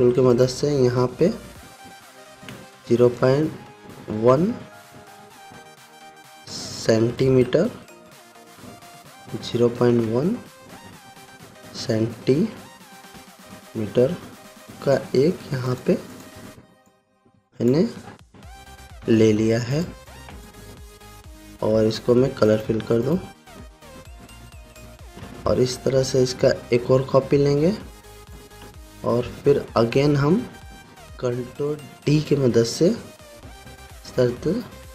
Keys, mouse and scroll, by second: 7.6-8.5 typing, 9.2 Tab, 12.2-13.7 typing, 14.6 Return, 16.2 click, 16.9 z, 17.4-18.4 drag, 19.6 v, 20.3-21.2 drag, 31.8 ctrl+d.